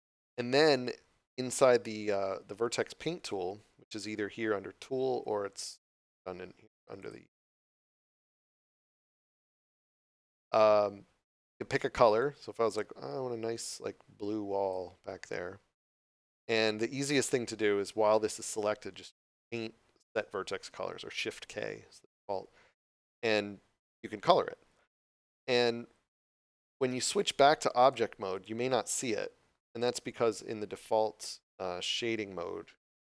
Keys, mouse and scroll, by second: 0.7 click, 12.2 click, 19.4 click, 27.8 click, 32.8 click.